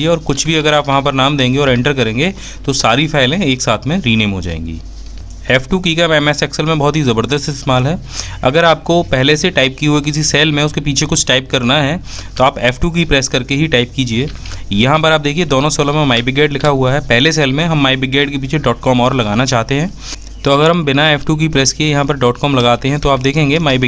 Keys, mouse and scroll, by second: 5.0 f, 5.5 F2, 17.1-17.5 typing.